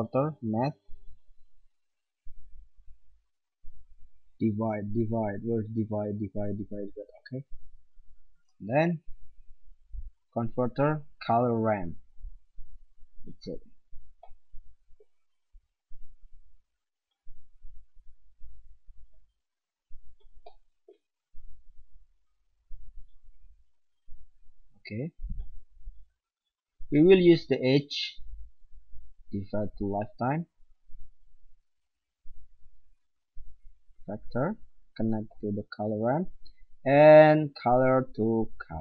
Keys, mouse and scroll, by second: 2.4-4.2 drag, 8.3 shift+a, 15.6-17.5 drag, 17.6-25.2 drag, 26.7-29.8 drag, 30.2-31.9 drag, 32.3-38.8 drag.